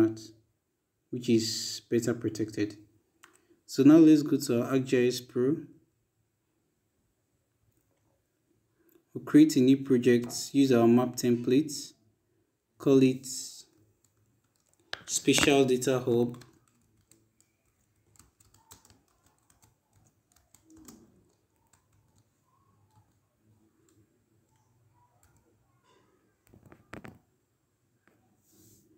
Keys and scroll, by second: 16.7-20.9 typing, 23.1 u, 25.4 b.